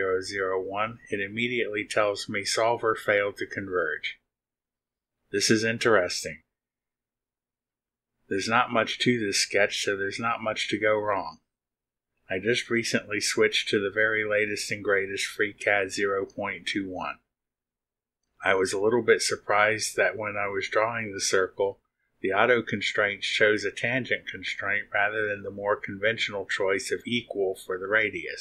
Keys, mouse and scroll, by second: 0.4 click, 2.8 middle click, 4.0-4.3 scroll up 1, 5.1 scroll up 1, 6.1 click.